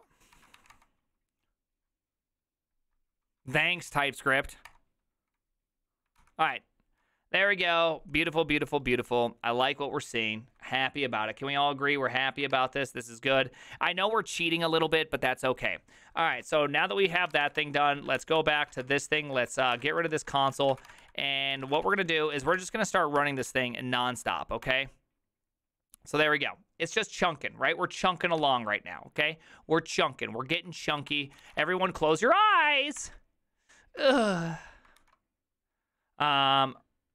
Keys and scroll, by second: 0.0-0.3 typing, 0.3 ctrl+c, 0.6 Up, 0.7 Return, 3.9 ctrl+a, 3.9 3, 4.2 Up, 4.7 Return, 6.2 ctrl+c, 16.9-23.2 typing, 18.2 ctrl+t, 18.4 ctrl+n, 18.6 ctrl+c, 18.7 ctrl+:, 21.3 ctrl+d, 23.5 Up, 24.6 Return, 28.4 alt+[, 30.8 alt+[, 31.1 alt+d, 31.1-32.1 typing, 33.0 Return, 33.4 shift+', 34.1 alt+Return, 35.0 alt+h.